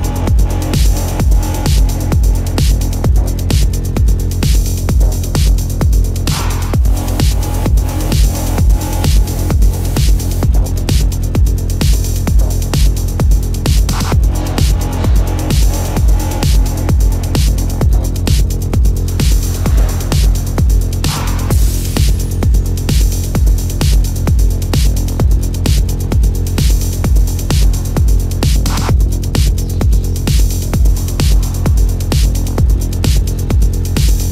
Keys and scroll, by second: 17.6 ctrl+alt+z, 19.6 ctrl+alt+z, 20.0 ctrl+alt+z, 23.0 ctrl+alt+z, 29.5 ctrl+alt+z, 33.2 ctrl+=.